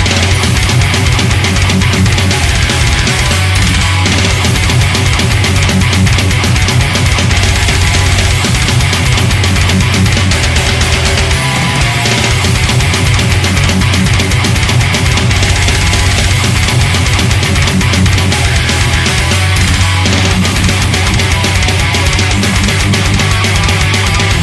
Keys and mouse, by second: 1.0 ctrl+z, 2.4 ctrl+z, 2.9 ctrl+z, 3.5 ctrl+z, 3.9 ctrl+z, 5.6 ctrl+z, 18.8 ctrl+z, 19.4 ctrl+z, 20.2 ctrl+z, 21.3 ctrl+z, 22.6 ctrl+z, 22.8 ctrl+z.